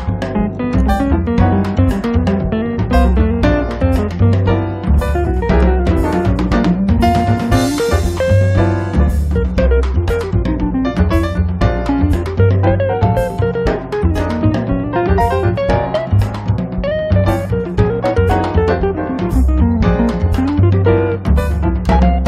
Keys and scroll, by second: 14.4 space, 17.1 m.